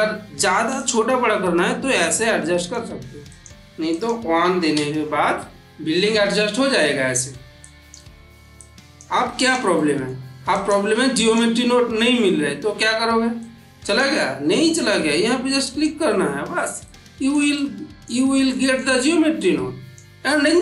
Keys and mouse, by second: 0.6-1.9 shift+drag, 5.5 middle click, 7.5 click, 9.6 middle click, 10.4 click, 13.3-13.9 drag, 15.5 click, 16.7-17.3 ctrl+middle drag, 19.3-19.9 click, 20.5-20.6 middle drag.